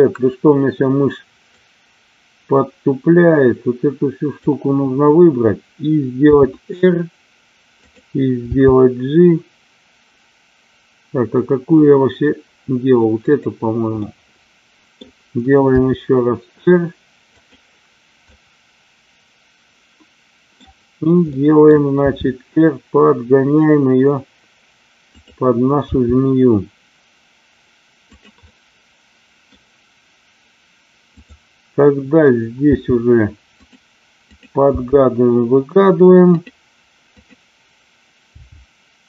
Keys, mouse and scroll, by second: 1.6-4.4 drag, 6.3 r, 8.4 g, 13.2 click, 13.9 middle click, 15.7 r, 17.3 click, 18.2-20.4 middle drag, 21.3 middle click, 22.1 r, 25.1 click, 25.8 g, 28.6-31.2 middle drag, 31.2 click, 32.6 g, 35.4 g, 36.2 click, 37.2 click, 38.2 g.